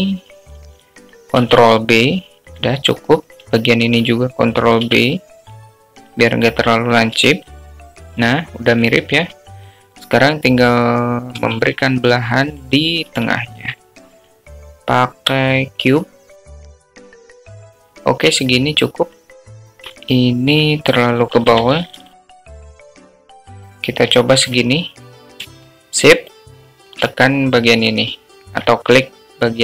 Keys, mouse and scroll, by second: 0.6 click, 0.7 click, 0.8 click, 2.4 ctrl+b, 5.2 click, 5.6 alt+middle click, 6.8 ctrl+b, 9.2 Tab, 9.5-10.8 middle drag, 15.4 shift+a, 17.7-19.4 drag, 19.5 alt+middle click, 20.4 alt+shift+middle drag, 22.0 alt+middle drag, 22.6 g, 26.3 alt+middle click, 28.2 shift+click.